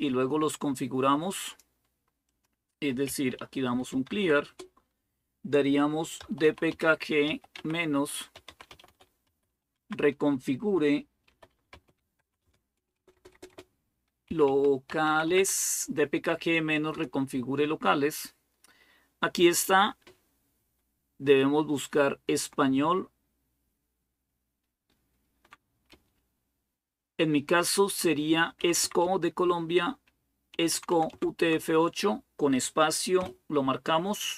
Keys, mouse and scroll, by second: 1.2-3.6 drag, 2.9-4.5 typing, 5.7-9.5 typing, 10.8-15.9 typing, 16.7 Return, 19.8 Down, 20.5-25.2 Down, 25.7 Down, 25.7-27.0 Up, 28.4 Up, 28.6 Up, 29.1 Up, 30.3 Down, 30.5 Down, 30.7 Down, 30.9 Down, 31.2 Down, 33.0 space.